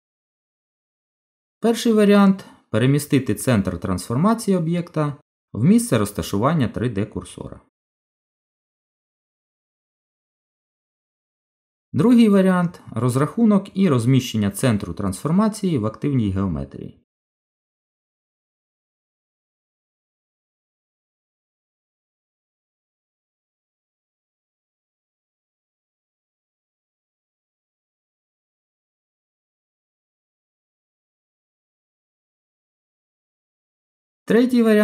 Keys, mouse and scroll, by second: 13.1 right click, 22.2 Tab, 23.2 g, 28.6 Tab, 33.0 right click.